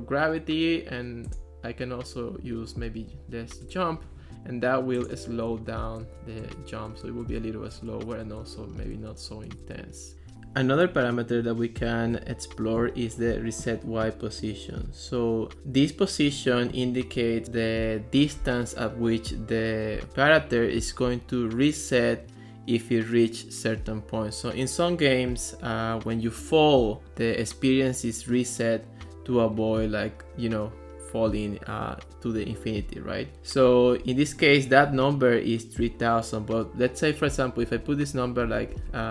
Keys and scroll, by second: 2.8-3.7 typing, 5.5 space, 9.6 space.